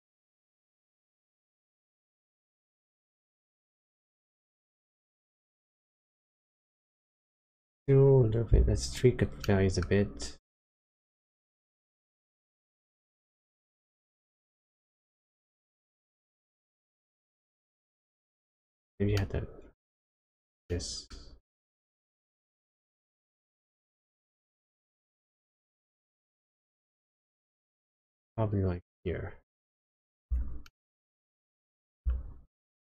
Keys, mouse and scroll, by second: 2.0 click, 7.8 shift+middle click, 7.8 scroll down 1, 9.4 middle click, 12.5 shift+click, 16.5 shift+click, 19.3 middle click, 20.1-20.6 scroll up 1, 20.6 middle click, 22.8 click, 30.9 shift+middle click.